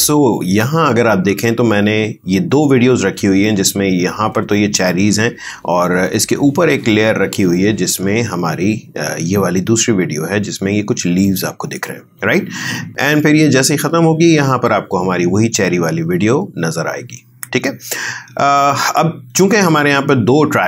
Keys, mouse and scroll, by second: 3.6-12.9 drag, 13.2-20.6 drag.